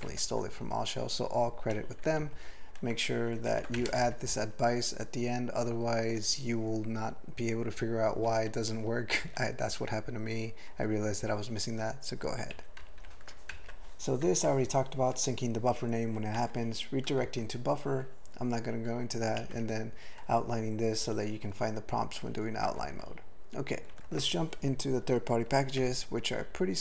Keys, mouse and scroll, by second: 0.1 ctrl+l, 2.2 ctrl+alt+f, 3.5 ctrl+n, 3.8 alt+m, 3.9 ctrl+space, 4.0 ctrl+e, 12.5 ctrl+g, 12.8 ctrl+n, 13.0 ctrl+n, 13.5 alt+m, 14.5 ctrl+alt+f, 16.4 ctrl+alt+f, 17.3 ctrl+l, 19.4 ctrl+alt+f, 22.7 ctrl+n, 22.9 ctrl+n, 23.9 ctrl+n, 24.0 ctrl+a, 25.8 Tab.